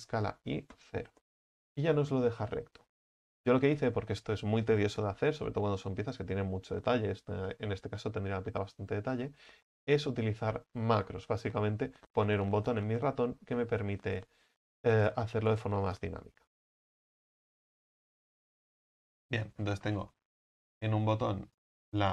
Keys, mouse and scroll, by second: 0.1 s, 22.0 alt+shift+right click.